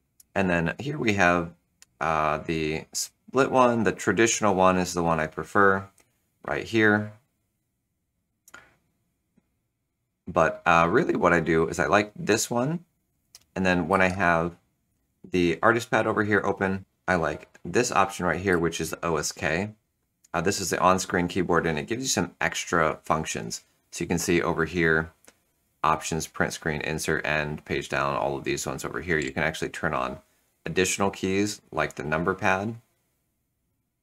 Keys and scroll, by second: 10.0 Return, 11.6 Return, 18.4 ctrl+super+o.